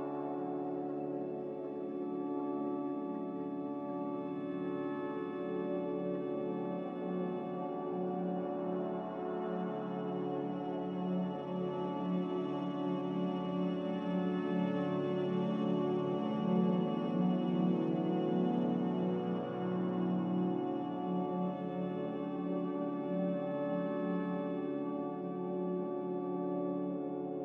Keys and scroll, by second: 14.4 n.